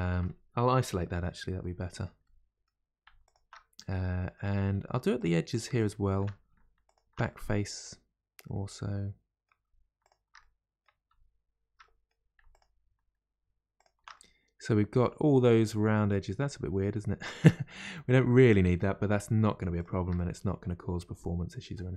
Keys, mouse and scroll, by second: 0.9 KP_Divide, 1.4-2.2 scroll down 1, 6.9 alt+shift+click, 12.6 alt+shift+click, 13.8 alt+shift+click, 21.9 scroll down 1.